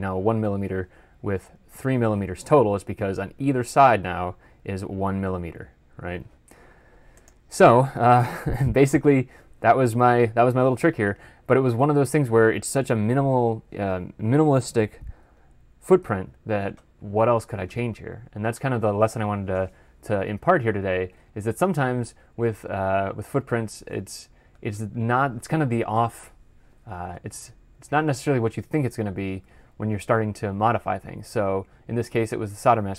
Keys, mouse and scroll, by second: 21.0 ctrl+F11.